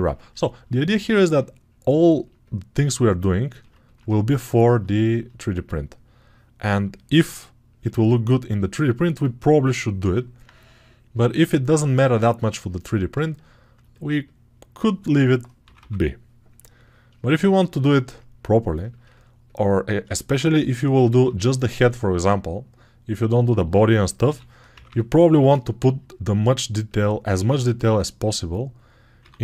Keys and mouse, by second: 3.3 ctrl+alt+right click, 4.2 alt+click, 4.6 alt+right click, 9.9-18.7 alt+drag, 15.0 6, 15.5 ], 15.6 ], 18.7 alt+shift+right click, 19.0-24.1 ctrl+alt+drag, 24.1-29.4 right drag, 24.1 g, 24.6 ], 24.7 ].